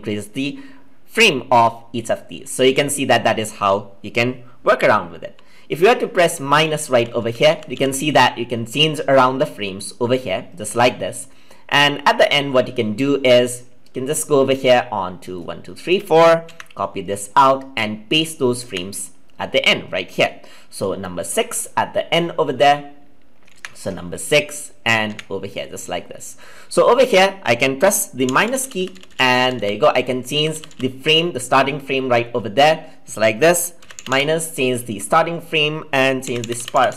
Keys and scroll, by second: 16.5 ctrl+c, 18.6 ctrl+v, 23.5 ctrl+c, 25.1 ctrl+v.